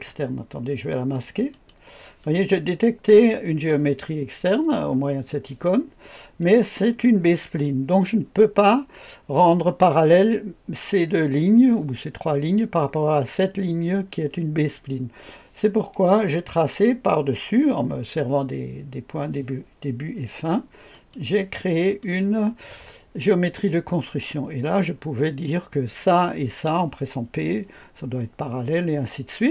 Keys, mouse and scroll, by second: 1.5 click, 20.9 click, 22.0 click.